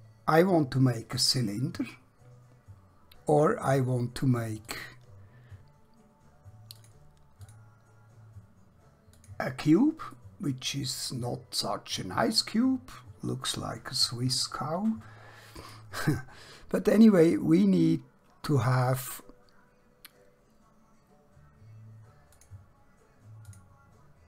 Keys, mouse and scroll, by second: 4.7 click, 10.2 middle click, 18.7 click, 22.4 click.